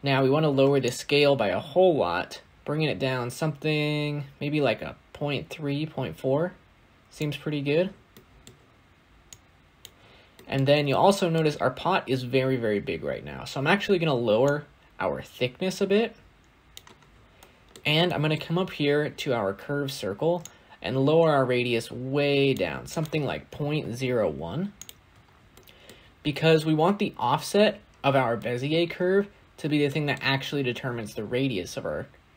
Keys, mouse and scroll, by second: 0.9-3.8 shift+drag, 10.8-14.4 middle drag, 14.4-24.7 drag, 25.2 scroll down 1, 25.4-25.8 middle drag, 25.8 scroll up 1, 26.0 scroll down 1, 26.0-26.7 scroll up 1, 26.7-27.2 scroll up 1, 27.2-27.9 scroll down 1, 29.7-32.3 middle drag.